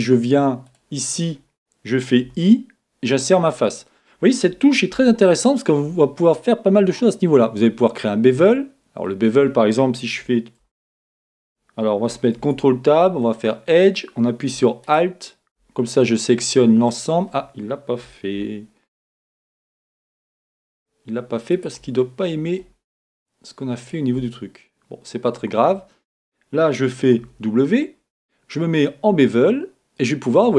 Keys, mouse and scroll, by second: 0.0 middle click, 0.6-2.4 right drag, 2.3 i, 3.7-5.6 drag, 4.9 w, 10.6 alt+Tab, 12.3 ctrl+Tab, 14.8-16.5 right drag, 16.2-18.0 middle drag, 19.2-21.0 right drag, 19.8-21.7 middle drag, 21.5-23.3 right drag, 22.0-23.9 middle drag, 23.8-25.5 right drag, 25.1 middle click, 27.6 w.